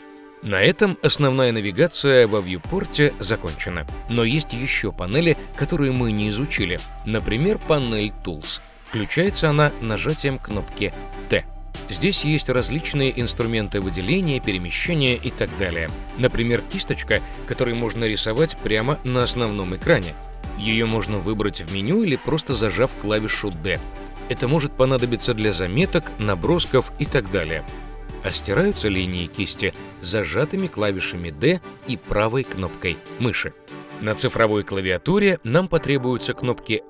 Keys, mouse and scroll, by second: 1.3-1.7 shift+middle drag, 3.6 KP_0, 4.3 KP_0, 6.5 t, 7.3 t, 13.8 click, 14.6 click, 15.1 click, 15.5 click, 16.9 click, 17.4-18.8 drag, 21.4-25.6 typing, 21.5-22.7 drag, 30.7 d, 32.5-34.0 right drag, 32.5 d, 36.5 KP_1.